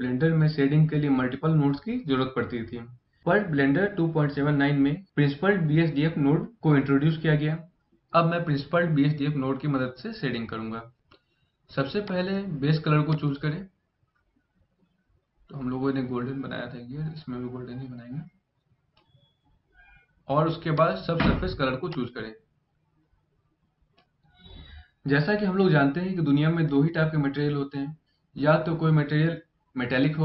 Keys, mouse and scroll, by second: 11.8 click, 20.5 click.